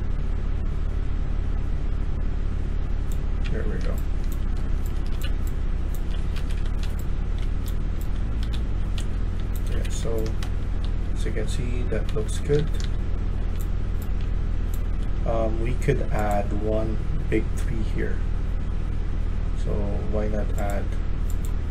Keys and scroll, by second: 3.3-13.3 typing, 6.3 Escape, 9.6 Escape, 9.9 Escape, 14.7-15.4 typing, 17.3 a.